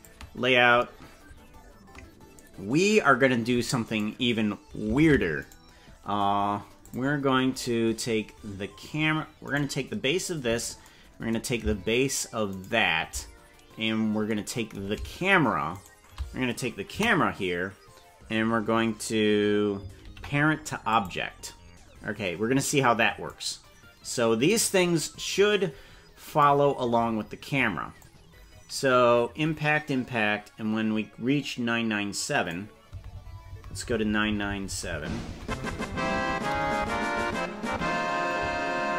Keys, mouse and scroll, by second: 0.0 click, 0.9-1.5 scroll up 8, 1.7 scroll down 1, 3.9 right click, 5.1 ctrl+Tab, 6.8 click, 9.6 right click, 12.6 shift+right click, 13.6-14.0 scroll down 5, 15.8 shift+right click, 17.0 KP_0, 20.0 ctrl+p, 23.3-24.6 drag, 26.3 right click, 28.0-32.5 drag, 33.0 Right, 33.2 Right, 33.4 Right, 33.6 Right, 33.8 Right, 33.9 Right, 34.1 Right, 34.3 Right, 34.5 Right, 34.7 Right, 34.9 Right, 35.1 Right, 35.3 Right, 35.5 Right, 35.7 Right, 35.9 Right, 36.3 Right, 36.7 Right, 36.9 Right, 37.3 Right, 37.7 Left, 38.5 Left.